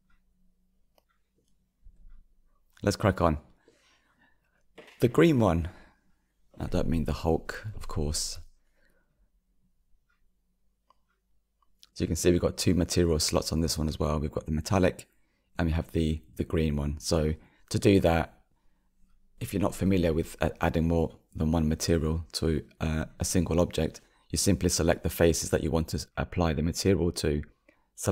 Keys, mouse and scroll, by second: 0.9-1.8 scroll down 6, 1.8-3.2 shift+middle drag, 3.2 click, 4.6 KP_Decimal, 5.7-8.8 middle drag, 8.8-15.7 drag, 18.3 click, 20.0 click, 22.4 Tab, 23.9 click, 24.4 click, 24.7 click, 25.2 click.